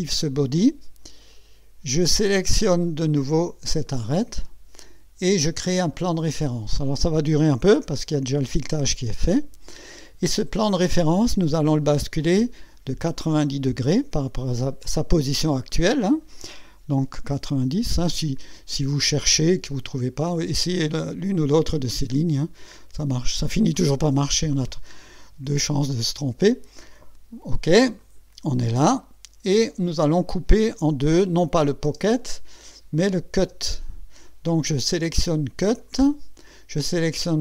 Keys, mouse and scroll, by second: 1.3 click, 3.9 click, 5.9 click, 10.2-10.7 scroll down 2, 14.7-16.1 drag, 17.2 KP_9, 17.5 KP_0, 19.8 click, 22.3 click, 23.4 click, 24.7 right click, 28.0 click, 29.0-30.1 drag, 31.4 click, 31.8 space, 33.0 click, 33.5 space, 35.8 click.